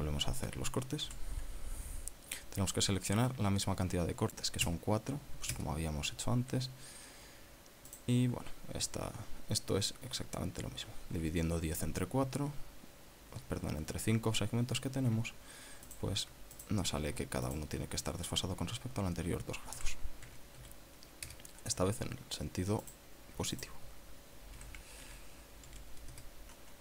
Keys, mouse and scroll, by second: 2.1 ctrl+r, 3.0-3.5 scroll up 4, 5.6 KP_Enter, 6.5 KP_Enter, 8.9 right click, 9.9 scroll up 1, 10.4 scroll down 1, 16.9 alt+shift+right click, 17.6 right click, 18.5 alt+shift+right click, 20.8 r, 21.3 z, 21.6 KP_2, 22.3 KP_Enter, 23.9 right click, 24.6 alt+shift+right click, 25.6 r, 26.1 z, 26.7 KP_4.